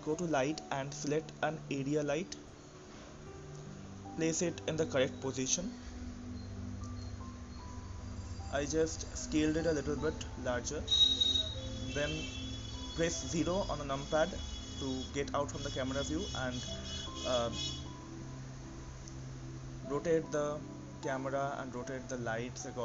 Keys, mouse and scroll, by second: 3.1 click, 6.6 s, 10.9 KP_0, 11.6-12.0 scroll down 1, 12.0-14.1 middle drag, 14.1 click, 15.2-15.8 scroll down 2, 15.8-16.9 middle drag, 16.9 click, 17.9 KP_0, 19.3-22.8 middle drag.